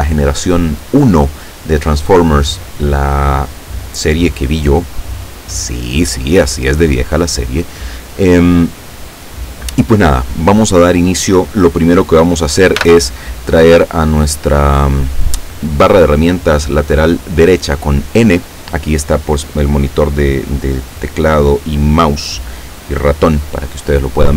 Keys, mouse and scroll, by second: 12.8 n, 20.8-23.1 drag, 24.0 scroll down 2.